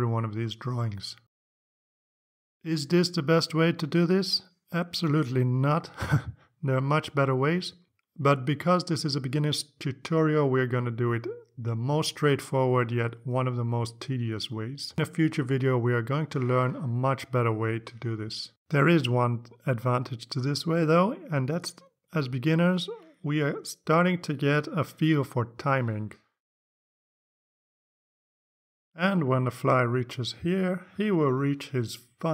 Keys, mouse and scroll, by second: 0.5 Up, 1.0 Down, 3.3 click, 5.0-7.8 drag, 8.8 click, 9.0 click, 9.3 click, 9.9 scroll down 2, 10.1 click, 10.4 click, 10.6 click, 11.2 Down, 11.4 click, 11.7 click, 12.3 Down, 12.6 click, 12.8 click, 13.4 Down, 13.6 click, 13.9 click, 14.3 Down, 14.6 Down, 14.9 click, 15.2 click, 15.9 Down, 16.2 click, 16.5 click, 16.9 Down, 17.3 Down, 17.5 click, 17.8 click, 18.2 click, 18.4 click, 18.7 click, 19.1 click, 19.3 click, 19.6 click, 20.1 click, 20.3 click, 20.7 click, 21.2 click, 21.4 click, 21.7 click, 22.1 click, 22.3 click, 22.6 click, 23.0 click, 23.3 click, 23.6 click, 24.3 click, 24.8 click, 25.0 click, 25.2 click, 25.6 click, 25.8 click, 26.0 click, 26.9 click, 27.1 click, 27.5-29.2 drag.